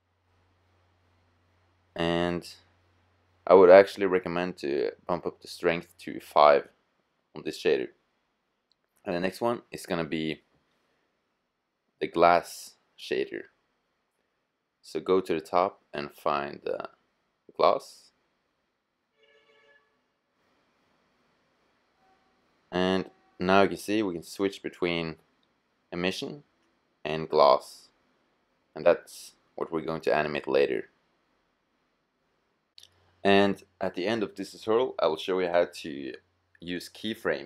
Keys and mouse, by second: 4.2 click, 22.5-24.2 drag, 29.3-31.2 drag, 34.2-36.5 middle drag.